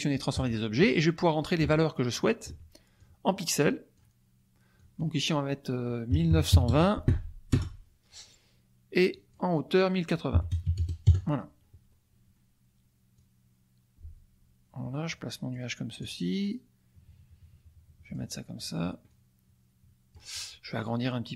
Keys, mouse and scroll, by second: 0.4 click, 2.9-4.1 drag, 4.7 click, 6.3 KP_9, 6.5 KP_2, 6.6 KP_0, 7.5 Return, 9.1 click, 10.5 KP_0, 10.6 KP_8, 11.0 KP_Enter, 13.1-15.7 drag, 16.0 click, 16.4-18.3 drag, 18.5 click, 19.1-20.3 drag.